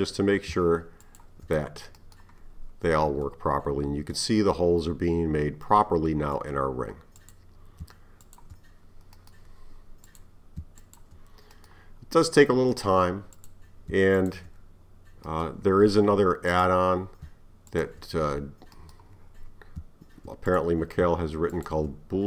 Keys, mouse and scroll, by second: 1.0 shift+click, 3.2 scroll up 1, 3.3-7.2 middle drag, 7.2 click, 8.2 shift+click, 10.1 click, 10.8 shift+click, 12.3-13.4 middle drag, 13.4 click, 14.2 shift+click, 16.5 click, 17.7 shift+click, 20.5 click, 21.5 shift+click.